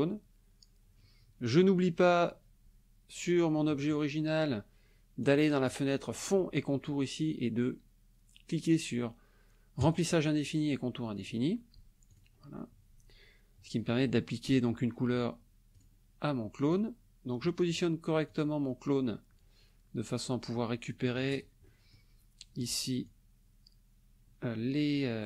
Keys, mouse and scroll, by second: 2.0 click, 5.2 click, 9.8 click, 10.4 click, 11.2 click, 12.1 click, 15.7 click, 16.7-17.6 drag, 18.3-21.5 drag, 21.6 click, 23.0-25.2 ctrl+drag.